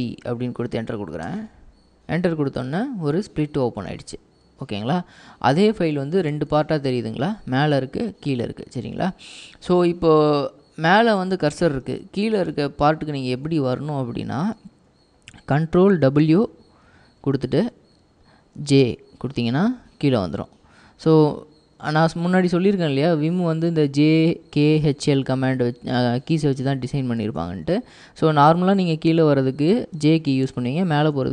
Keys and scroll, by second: 0.0-0.4 typing, 1.3 Return, 3.8 typing, 6.4 k, 11.5-13.8 typing, 17.0 ctrl+w, 18.9 j, 22.1-22.5 typing, 27.1-31.3 typing.